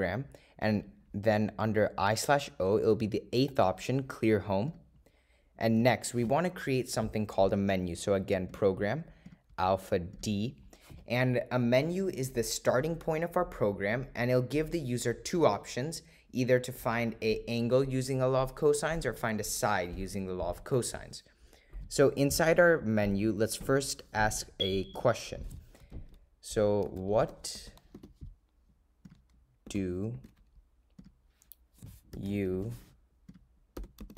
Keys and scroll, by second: 0.9 Right, 4.9 8, 5.9 Return, 27.0 -, 27.4 ^, 28.1 4, 29.2 0, 30.3-33.4 typing.